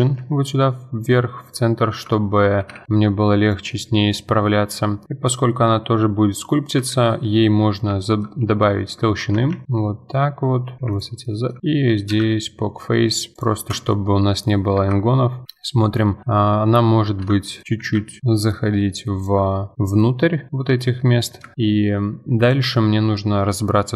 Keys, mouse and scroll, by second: 0.0 s, 1.7-2.1 scroll up 2, 2.1-2.6 shift+middle drag, 2.6 g, 3.7-6.4 middle drag, 6.8 KP_Divide, 7.6-9.0 middle drag, 9.0 Tab, 9.5 a, 10.9 click, 11.2 middle click, 11.6 shift+click, 12.1 ctrl+f, 13.7 Tab, 13.9-14.8 middle drag, 14.8 KP_Divide, 15.4 KP_7, 15.9-16.2 scroll up 1, 16.2 z, 17.0 z, 17.4-17.8 shift+middle drag, 17.8 s, 19.5 middle drag, 19.7 click, 19.8-21.2 middle drag, 21.2-21.5 scroll down 2, 21.5-22.4 shift+middle drag, 22.4 click, 22.8-23.9 middle drag.